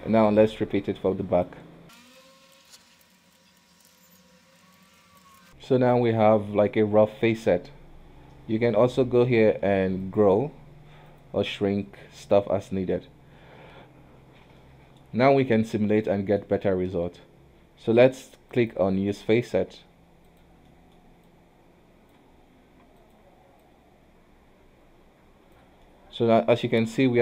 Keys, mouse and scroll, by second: 0.1 shift+z, 0.5 click, 1.9 Tab, 2.1 h, 2.3 click, 2.5 q, 2.6 Tab, 2.7 alt+a, 2.9 click, 3.0 Tab, 3.1 shift+z, 3.2 scroll down 1, 3.2 Tab, 3.3 middle click, 3.3 alt+a, 3.4 middle click, 3.5 Tab, 3.7 KP_3, 3.8 ctrl+KP_1, 3.9 Tab, 4.1 click, 4.7 Tab, 5.0 alt+a, 5.1 Tab, 5.3 alt+h, 5.3 shift+z, 5.4 middle click, 5.5 KP_1, 5.8-7.3 middle drag, 7.3-7.8 scroll up 2, 8.8-11.3 drag, 11.5-14.5 drag, 14.7-18.6 middle drag, 18.6 click, 19.3 middle click, 19.8 f, 20.8 middle click, 21.4 click, 22.4 scroll up 2, 22.7 f, 23.7 click, 26.0 middle click, 26.4 scroll down 1, 26.7-27.2 middle drag.